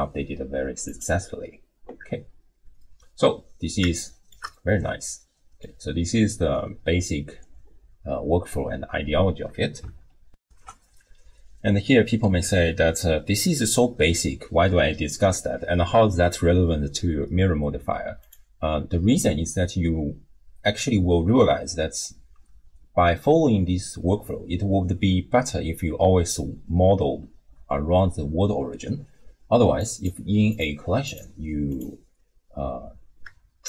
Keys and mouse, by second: 0.9 click, 2.9-3.8 middle drag, 4.1 shift+middle click, 4.7-5.6 middle drag, 10.4 ctrl+alt+shift+w, 10.5 ctrl+alt+shift+q, 18.2 click, 30.5 click.